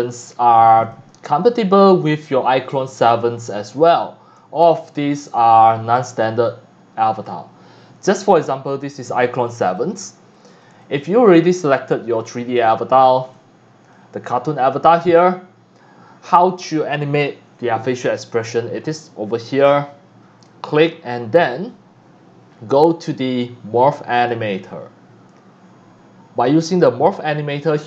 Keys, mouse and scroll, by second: 0.8 click, 1.9 click, 3.4 scroll down 1, 4.0-5.0 drag, 4.0 x, 4.4 c, 5.2 scroll up 1, 5.8 scroll down 1, 6.2-7.2 drag, 6.3 x, 9.7 click, 9.8 click, 10.3 click, 10.8 x, 10.8 click, 11.5 scroll up 4, 12.3 x, 12.3 click, 13.3 c, 13.4 click, 18.8 click, 19.5 click, 20.5 click, 22.8 scroll down 1, 24.2 click, 27.2-27.8 drag.